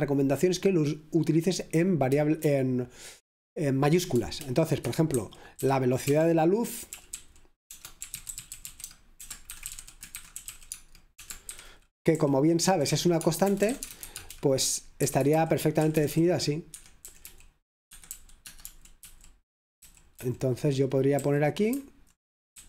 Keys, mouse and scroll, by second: 0.0-1.0 typing, 4.9 Caps_Lock, 4.9-15.3 typing, 16.8 typing, 17.0 Escape, 18.2-18.9 typing, 19.0 Caps_Lock, 20.7-21.7 typing.